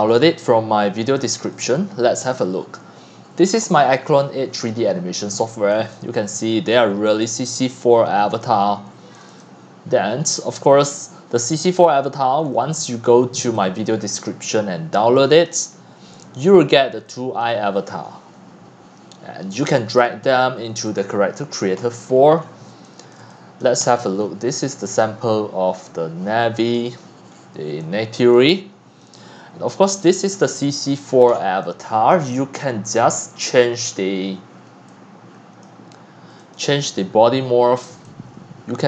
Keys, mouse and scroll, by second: 0.2 middle click, 1.1 x, 1.6 click, 1.7-2.3 c, 4.8 click, 5.0-8.8 typing, 5.7 drag, 6.7 middle click, 6.7 scroll, 8.4 click, 9.2 click, 9.4 click, 11.6-12.0 scroll down 4, 12.4 click, 12.5 scroll, 12.5-13.7 typing, 13.6 click, 17.0 click, 20.2-21.0 drag, 21.2-21.8 drag, 21.8-22.8 scroll up 23, 23.1 click, 23.6 click, 23.9-24.4 scroll, 24.8-26.2 c, 26.2-26.7 BackSpace, 27.2 click, 27.3 click, 27.3 click, 28.2 click, 28.3 c, 28.7 c, 29.0-30.0 drag, 30.0-30.6 scroll down 9, 30.9 click, 31.1 scroll, 32.1 click, 32.9-34.9 drag, 36.6 click, 37.1-38.0 scroll, 37.7-38.8 typing.